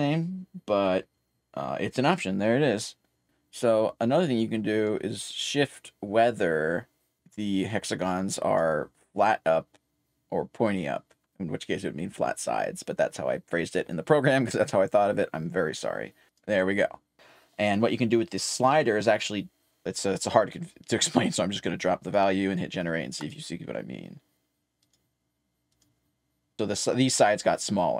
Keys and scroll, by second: 1.7-2.5 typing, 5.9-7.6 typing, 16.0-17.6 typing, 20.4-21.9 typing.